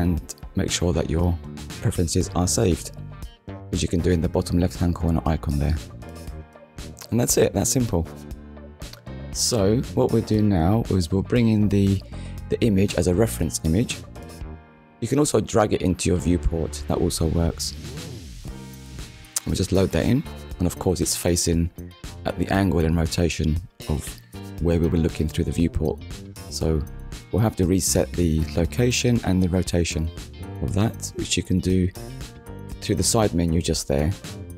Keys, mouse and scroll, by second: 0.4 click, 1.7 r, 1.8 a, 7.4 click, 11.7 click, 12.2 shift+a, 15.0 click, 16.6 click, 17.5 click, 19.0 click, 20.3 middle click, 23.2 click, 24.4 shift+r, 24.8 e, 25.8 n, 26.6 Return, 28.7 click, 29.8 click, 31.6 click.